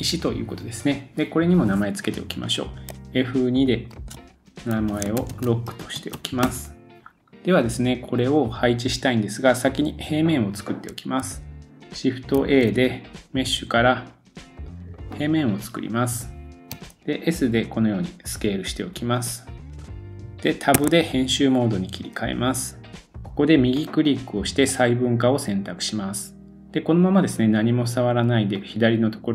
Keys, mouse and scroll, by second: 3.9 F2, 5.1 shift+click, 5.3-8.4 middle drag, 7.1 click, 7.1 scroll down 4, 10.9-12.7 shift+middle drag, 12.3 shift+a, 16.7 s, 17.5-19.7 middle drag, 20.0 scroll down 3, 20.1-22.5 middle drag, 20.8 Tab, 23.0 middle click, 23.8-26.8 right drag, 26.8-29.3 drag.